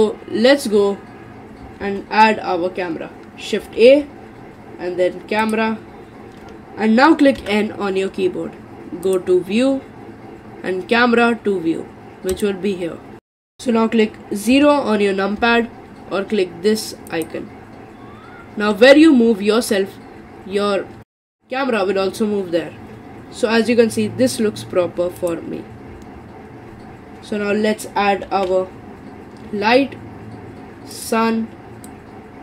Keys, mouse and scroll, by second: 1.8 shift+a, 3.8 shift+a, 7.4 n, 9.1 click, 12.3 click, 13.2 click, 13.4 n, 14.5 KP_0, 15.4 KP_0, 17.1 click, 18.2 scroll down 3, 18.5 scroll up 3, 18.7-21.2 scroll down 19, 21.2-22.4 shift+middle drag, 25.3 click, 28.3 shift+a, 31.9 click.